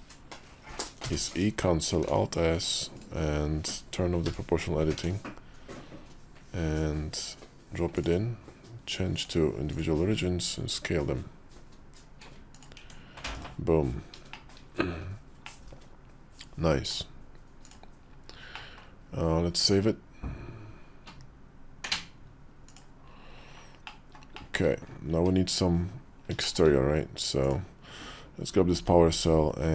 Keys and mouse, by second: 1.0 e, 1.9 alt+s, 4.8 o, 4.9 alt+s, 9.0 click, 10.0 s, 12.6 Tab, 13.2 /, 14.2 shift+middle click, 15.3-16.8 middle drag, 18.4 middle click, 21.7-22.8 drag, 23.7 middle click, 24.2 shift+middle click, 25.7 KP_5, 26.3 shift+middle click, 27.3 click.